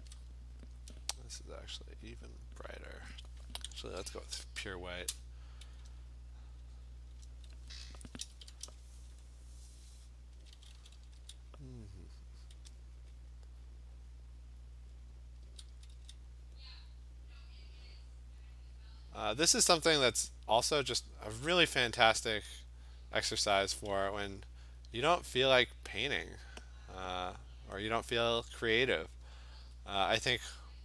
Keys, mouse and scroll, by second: 0.1 alt+click, 3.7-5.0 x, 5.0 click, 5.1 click, 7.2 click, 8.2 ], 8.4 ], 8.6 ], 9.3 click, 9.7 click, 9.9 click, 10.2 click, 10.5 [, 10.8 [, 10.9 [, 11.2 [, 11.2 click, 12.6 click, 14.6 click, 14.9 click, 15.4 [, 15.7 [, 15.9 [, 16.5 click, 17.4 click, 19.6 click, 20.1 click, 21.7 click, 22.9 click, 23.3 click, 24.9 alt+click, 25.0 alt+click, 27.4 click, 29.1 click, 29.6 alt+click, 30.1 click.